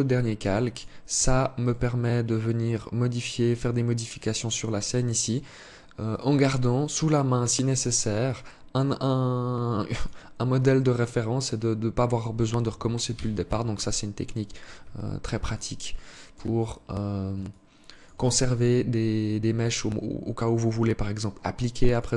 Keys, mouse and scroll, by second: 0.1 click, 1.1 right click, 5.5 click, 6.9 click, 7.7 click, 9.4 click, 12.5 KP_1, 14.9 alt+shift+click, 16.1 scroll up 2, 16.9 alt+shift+click, 21.3 click.